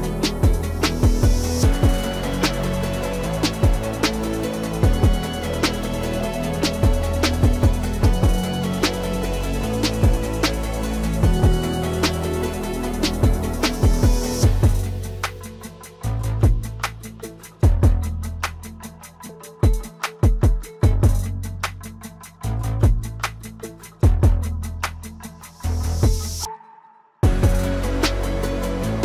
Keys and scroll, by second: 15.9 ctrl+s.